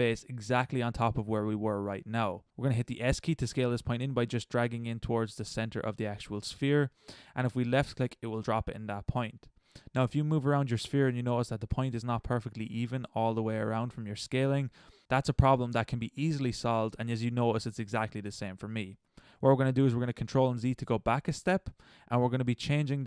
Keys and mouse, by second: 8.3-10.8 middle drag, 12.7-15.9 middle drag, 20.2 ctrl+z.